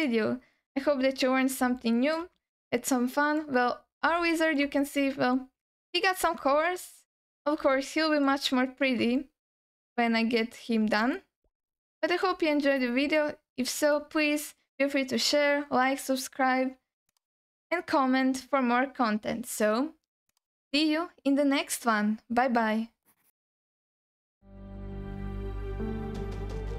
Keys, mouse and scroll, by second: 0.7-1.1 scroll up 1, 1.1-1.5 scroll down 2, 1.7 alt+shift+middle click, 2.5 alt+middle click, 3.6-4.0 scroll up 2, 4.2 alt+shift+middle click, 4.9 scroll down 1, 5.3-6.3 alt+middle drag, 6.5 alt+shift+middle click, 7.0 scroll up 1, 7.4 scroll down 1, 7.7 alt+shift+middle click, 8.5-9.0 scroll up 2, 9.2 alt+shift+middle click, 10.4-11.0 scroll down 2, 11.0 alt+middle click, 11.9 alt+shift+middle click, 12.5-13.0 scroll down 3, 13.2 alt+middle click.